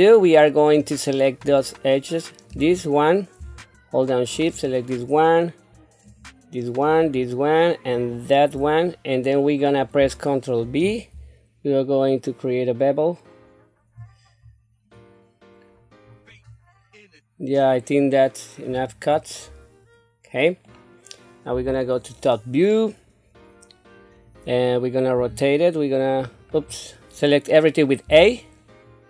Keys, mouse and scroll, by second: 0.0 middle click, 2.5 click, 4.3 shift+click, 6.0 shift+click, 6.8 shift+click, 7.9 shift+click, 8.8 scroll down 1, 9.3 middle click, 10.6 ctrl+b, 19.4 scroll down 1, 20.4 middle click, 21.5 KP_7, 25.1 r, 28.0 a.